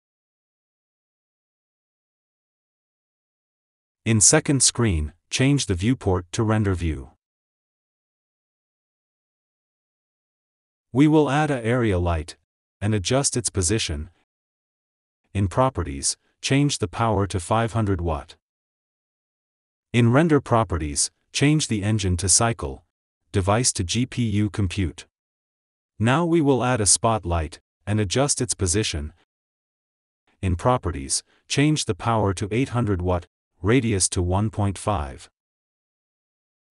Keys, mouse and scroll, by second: 0.1 r, 3.8 r, 6.7 click, 7.9 click, 9.1-12.9 scroll down 1, 13.0 click, 13.2 r, 14.3 g, 18.6 KP_0, 23.2 click, 23.2 scroll down 7, 25.9 scroll down 2, 26.2-26.9 shift+middle drag, 26.9-28.9 shift+right drag, 28.9 shift+middle click, 29.0 r, 33.2 KP_0, 35.2 click.